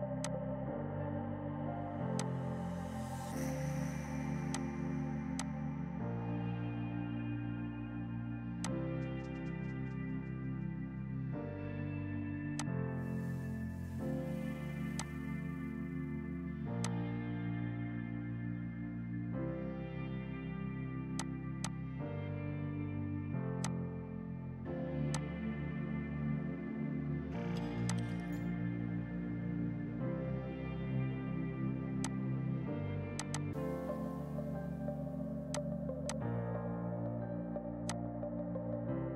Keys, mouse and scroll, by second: 0.3 shift+click, 2.2 click, 4.5 click, 5.8 shift+Right, 8.0 shift+Right, 8.7 click, 9.0 shift+Left, 10.4 Escape, 12.6 click, 13.2 F4, 14.8 F2, 15.1 click, 15.2 right click, 16.9 click, 17.6 right click, 21.2 click, 27.9 click, 29.4 F11, 32.1 click, 34.1 KP_6, 34.2 KP_0, 34.5 KP_Enter, 35.6 click, 36.0 F2, 36.1 click.